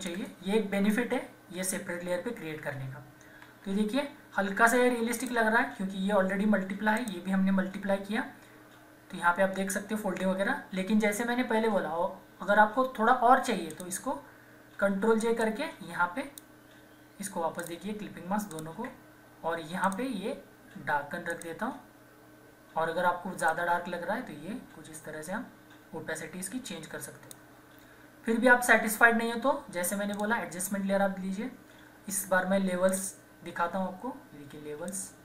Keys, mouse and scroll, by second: 0.1 Return, 3.2 Return, 3.4 =, 5.2 click, 13.7 click, 14.8 ctrl+j, 15.4-29.9 drag, 30.1 click, 32.9-35.2 drag.